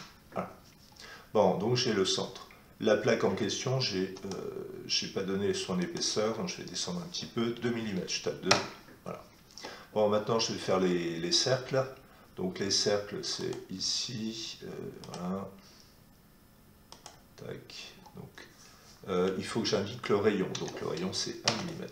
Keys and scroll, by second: 7.5 2, 8.5 Return, 20.5 1, 21.4 Return.